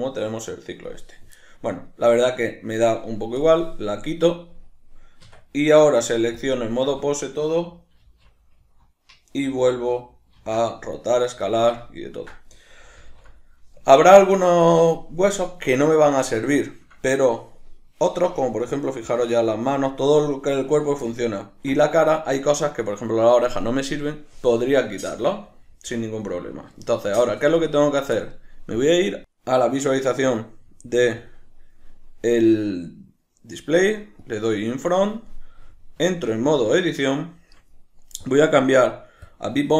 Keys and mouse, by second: 5.2 Tab, 11.4-28.7 shift+middle drag, 13.0 alt+q, 28.7-29.5 drag, 31.2-36.0 drag, 36.0 Tab, 37.3-38.3 shift+middle drag, 38.3-39.7 drag.